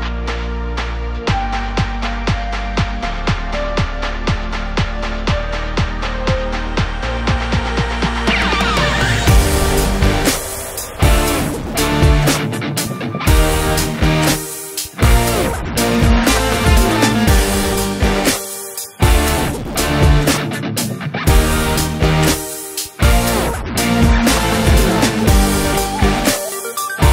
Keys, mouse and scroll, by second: 0.3-5.4 middle drag, 1.6 z, 1.8-2.2 scroll up 2, 2.2 Tab, 3.1 `, 3.5 Escape, 3.8 ctrl+b, 5.5 Tab, 5.7 click, 5.8 scroll down 1, 6.0-10.6 middle drag, 8.9 ctrl+s, 12.4-15.6 drag, 13.3 shift+a, 16.1 click, 16.6 click, 17.6-19.3 drag, 18.1 KP_Enter, 19.6 click, 20.1-22.9 middle drag, 22.9 click, 23.8 click, 24.6 click, 25.5-27.1 middle drag, 26.4 ctrl+s.